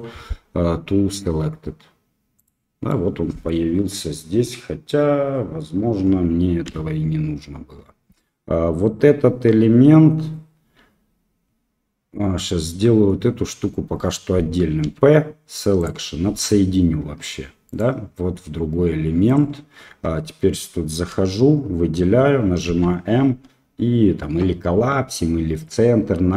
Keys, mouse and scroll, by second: 2.8 click, 3.4 middle click, 6.6 x, 14.8 p, 17.0 Tab, 19.2 click, 19.8 Tab, 21.0 a, 22.6 m.